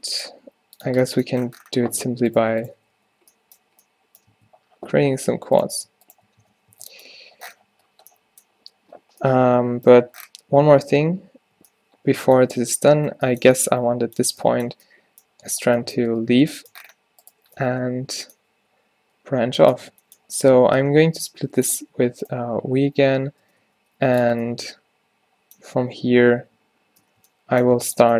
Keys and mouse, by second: 0.4 g, 1.0 Tab, 1.8 Tab, 2.8 f, 3.0 f, 3.7 f, 4.0 right click, 4.4 Tab, 4.9 Tab, 6.5 q, 6.8 Tab, 11.0 z, 11.6 z, 16.2 Tab, 17.3 middle click, 18.0 middle click, 18.2 middle click, 19.7-20.9 middle drag, 20.9 v, 22.3-23.5 drag, 22.5 h, 23.5 ctrl+z, 23.8 g, 26.2 h, 27.1 ctrl+z, 27.7 g.